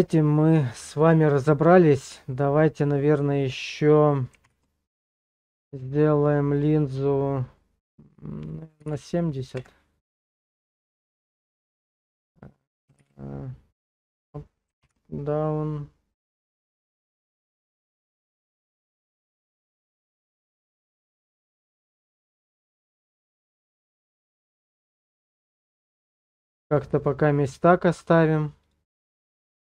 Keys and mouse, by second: 4.4 Page_Down, 11.8 Return, 11.8 BackSpace, 11.8 7, 11.8 0, 13.0 Up, 14.8 Page_Down, 18.8 ctrl+middle click, 20.7 shift+middle click, 21.7 ctrl+middle click, 23.4 shift+middle click, 29.0-29.6 drag.